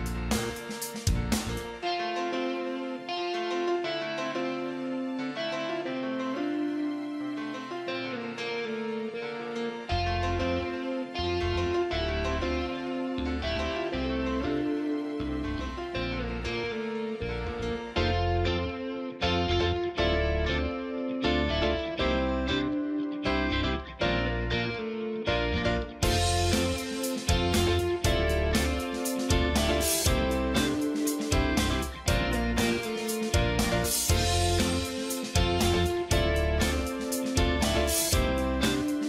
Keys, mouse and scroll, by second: 1.7 click, 2.6-6.8 typing, 4.5 click, 7.2 click, 8.9 click, 9.8 ctrl+z, 10.4 ], 10.5 ], 10.9 [, 11.1 click, 18.9 click, 19.2 right click, 19.8 click, 21.1-23.8 alt+shift+drag, 23.8-34.2 drag, 33.9 click.